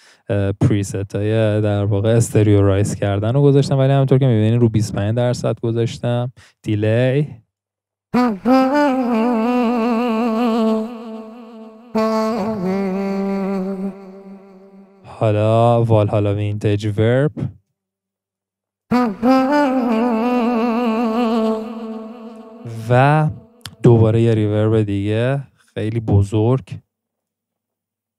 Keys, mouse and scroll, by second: 8.1 scroll, 11.9-13.9 scroll down 4, 13.9-16.0 middle drag, 18.9-19.3 drag, 19.3 scroll, 20.4 scroll, 21.9-22.3 drag.